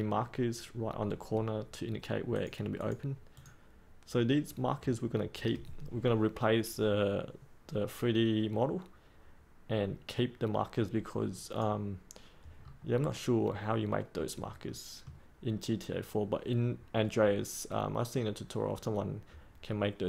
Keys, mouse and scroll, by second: 12.5-14.6 scroll up 1, 14.6 middle click.